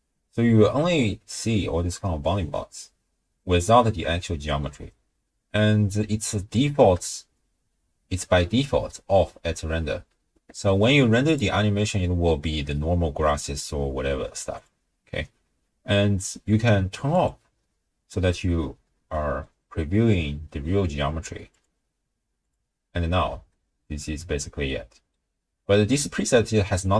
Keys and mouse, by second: 0.9-1.4 drag, 0.9-1.4 right drag, 1.5-4.7 drag, 1.5-4.7 right drag, 6.0 click, 11.3-13.4 drag, 14.5 click, 17.2 click, 19.6-20.7 middle drag, 21.5 click, 22.5 click, 23.5-24.2 middle drag, 24.4 middle click, 26.8 click.